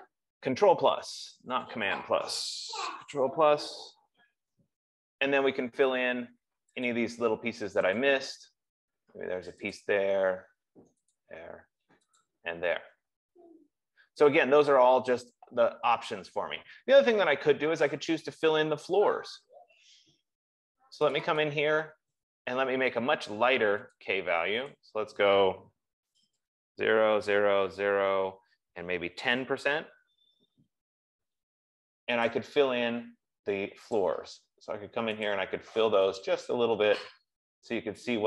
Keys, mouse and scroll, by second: 3.6 ctrl+=, 4.3 ctrl+=, 7.4 click, 8.4 click, 10.2 click, 14.3 F15, 21.6 click, 21.8 click, 24.6 click, 25.1 click, 26.3 ctrl+a, 27.0-30.9 typing, 32.8 click, 34.3 click, 35.6 click, 36.6 click.